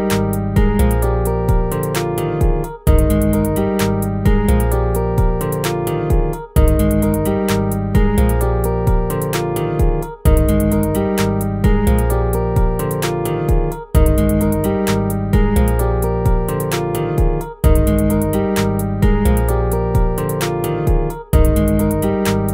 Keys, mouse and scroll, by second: 6.1 ctrl+-, 11.9 ctrl+z.